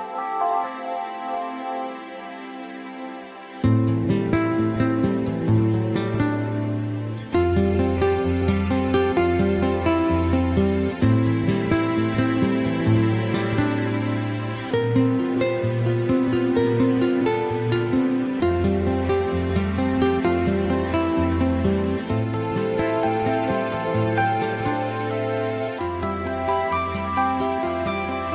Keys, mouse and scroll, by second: 1.1 e, 16.9 click, 18.0 middle click, 26.9 click.